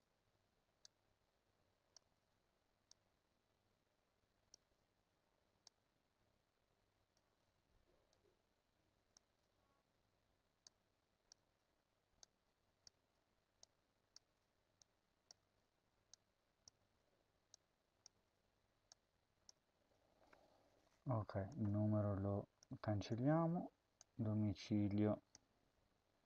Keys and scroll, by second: 2.0 ctrl+v, 11.4 ctrl+c, 13.0 ctrl+v, 14.2 ctrl+v, 22.6 BackSpace, 23.0 BackSpace, 25.4 ctrl+c.